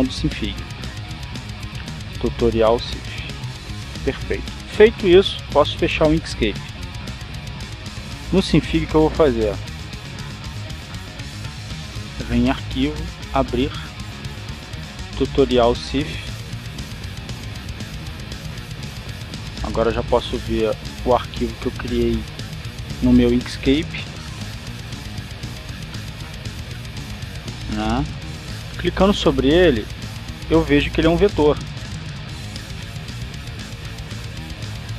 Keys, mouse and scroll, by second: 2.1 click, 4.1 click, 8.6 click, 13.2 click, 14.5 click, 16.0 click, 17.6-18.7 drag, 18.8 click, 20.2-22.9 drag, 24.3-28.6 drag, 30.2 click, 31.0 click, 33.5-34.9 drag.